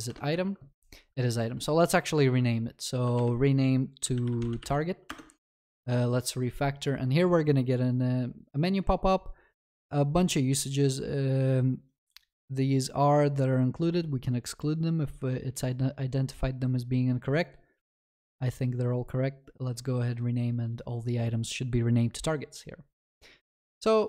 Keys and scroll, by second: 0.1 Return, 1.5 ctrl+s, 1.5 shift+F6.